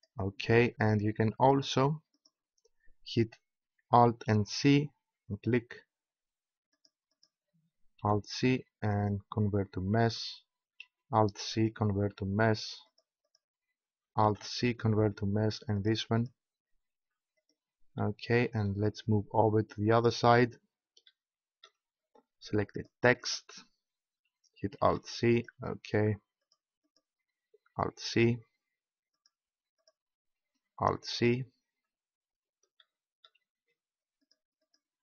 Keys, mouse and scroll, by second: 1.6-4.2 right drag, 4.2 alt+c, 7.4 right click, 7.9 alt+c, 8.4-9.4 right drag, 10.1 click, 11.8 alt+c, 12.8-14.2 drag, 14.2 alt+c, 14.7 click, 15.7 click, 17.4 alt+c, 22.7-25.4 right drag, 24.9 alt+c, 26.4-31.4 right drag, 27.7 alt+c, 30.7 alt+c, 34.2-35.0 right drag.